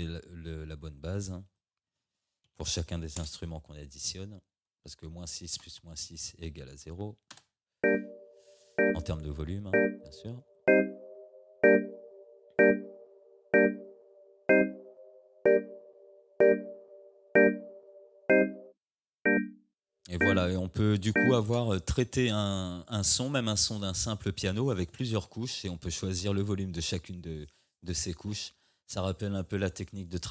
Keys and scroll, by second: 2.5 -, 3.2 Return, 7.3 space, 21.5 space.